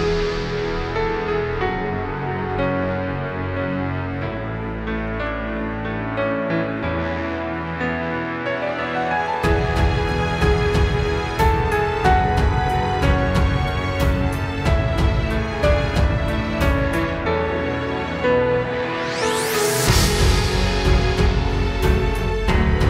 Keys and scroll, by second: 14.1 space, 14.7 super+space.